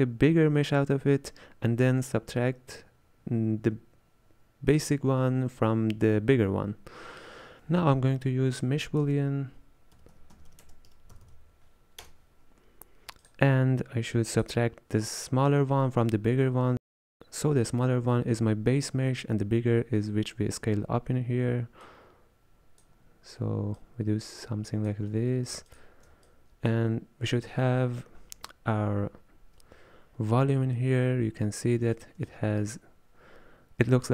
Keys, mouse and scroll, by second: 7.6 b, 9.1 space, 11.3 o, 14.2 click, 21.9-23.9 drag, 25.8 alt+shift+click, 29.0 z, 31.7-32.2 scroll up 4, 32.3 shift+middle click, 32.9-33.7 scroll up 1.